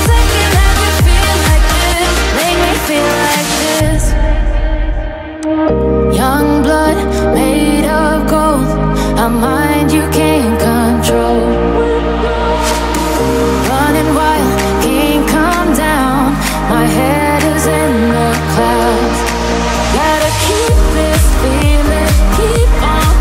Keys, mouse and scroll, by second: 3.1 p, 5.0 Tab, 5.5 click, 7.2 click, 19.6 Tab, 20.9-21.5 scroll up 1, 21.5 click, 22.7 g.